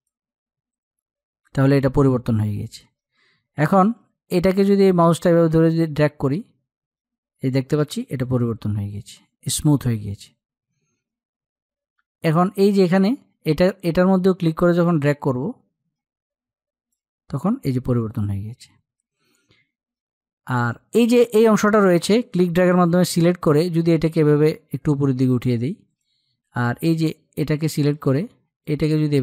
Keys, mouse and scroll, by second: 4.6-8.8 drag, 12.3-17.4 drag, 19.8-29.2 drag.